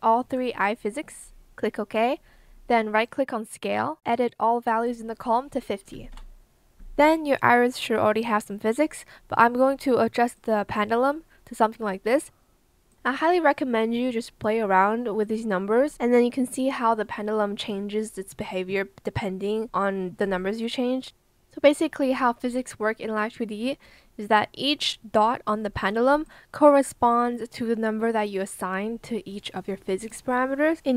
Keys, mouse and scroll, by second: 5.9 KP_5, 6.0 KP_0, 6.9 Return.